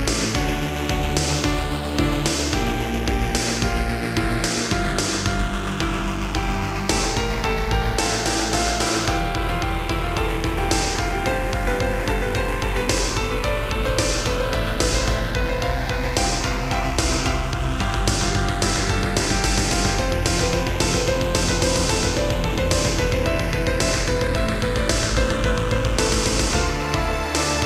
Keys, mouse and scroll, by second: 0.3 middle click, 1.8 Left, 2.1 Left, 2.7 Right, 3.0 Right, 5.5 click, 5.6 click, 6.3 7, 7.5 r, 9.4 click, 10.3 ctrl+c, 10.6 Right, 11.1 ctrl+v, 12.7 Left, 13.3 Left, 13.9 Right, 15.6 middle click, 17.5 click, 17.6 click, 18.7 shift+click, 20.4 shift+click, 20.5 shift+click, 21.6 shift+click, 21.8 shift+click, 22.7 g, 25.1 click, 25.5 middle click, 26.6 Left, 26.9 Left, 27.4 Left, 27.6 Right.